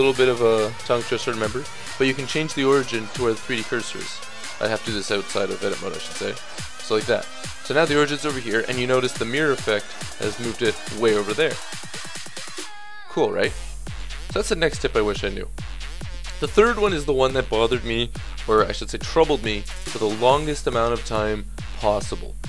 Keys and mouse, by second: 4.4 Tab, 6.0 ctrl+alt+shift+c, 11.8-16.5 middle drag, 13.5 ctrl+z.